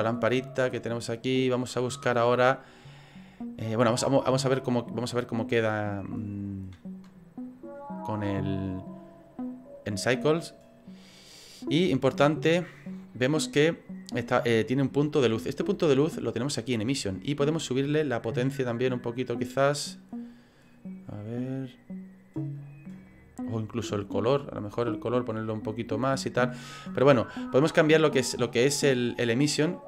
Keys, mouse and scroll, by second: 17.5 right click, 17.5 click, 17.5-17.8 scroll down 2, 18.4-19.6 scroll down 7, 22.2 click, 22.2-23.3 scroll down 2, 24.4-24.7 scroll down 3, 24.7 click, 28.0 scroll up 1.